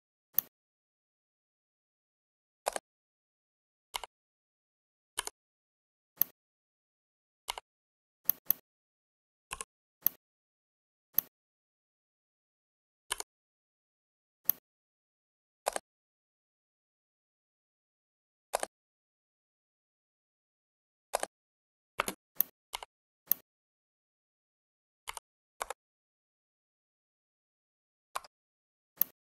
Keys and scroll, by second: 21.8 space, 25.0 5, 25.5 Return, 28.2 Escape.